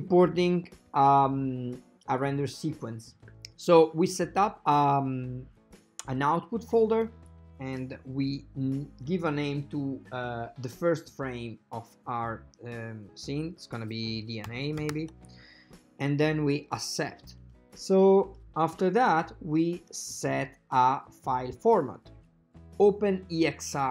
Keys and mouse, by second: 17.6-18.8 drag, 23.1 click.